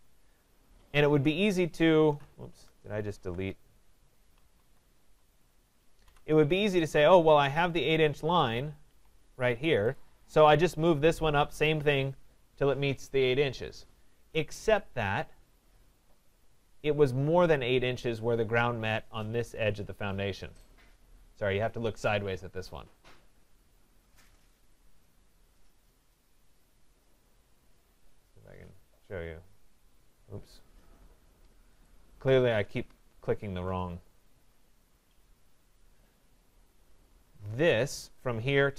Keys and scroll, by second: 2.3 ctrl+z.